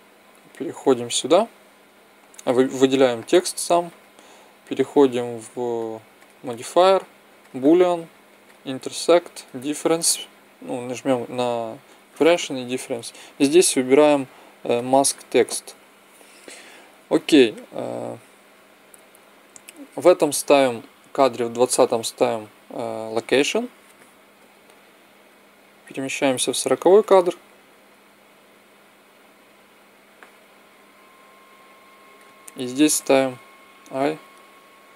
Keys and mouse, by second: 0.3-2.0 right drag, 3.8-8.1 drag, 8.4-10.2 drag, 12.7-14.5 drag, 17.1-19.1 right drag, 19.2-21.6 right drag, 21.6 i, 25.2-27.0 drag, 28.8-30.8 drag, 33.7 i.